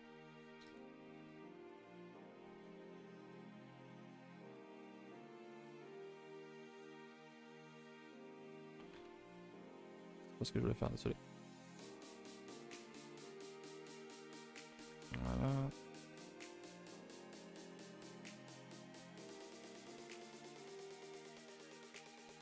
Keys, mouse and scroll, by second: 0.7 KP_0, 1.7 KP_0, 9.0 1, 12.0 click, 12.9 click, 13.7 click, 14.6 click, 15.7 click.